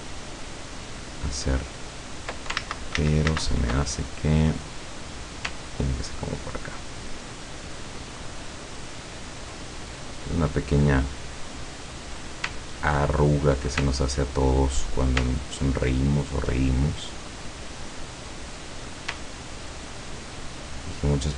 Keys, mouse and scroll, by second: 0.3-1.3 ctrl+drag, 1.8 ctrl+click, 2.6 ctrl+z, 4.0-4.3 ctrl+scroll down 3, 4.6-5.1 scroll up 2, 5.8 ctrl+click, 6.9 ctrl+click, 8.0 ctrl+click, 9.0 ctrl+click, 9.9 ctrl+click, 10.8 ctrl+click, 11.6 ctrl+click, 12.6 ctrl+click, 13.2 ctrl+click, 13.9 ctrl+click, 14.6 ctrl+click, 15.3 ctrl+click, 16.0 ctrl+click, 17.1 scroll down 1, 18.4 middle click, 19.6 ctrl+click, 20.5 ctrl+click.